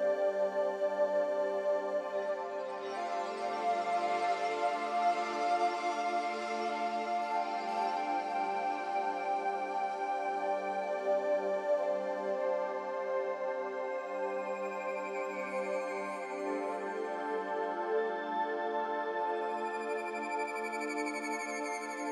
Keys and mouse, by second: 6.3-6.9 middle drag, 9.4 g, 13.6 s, 21.8-22.1 drag.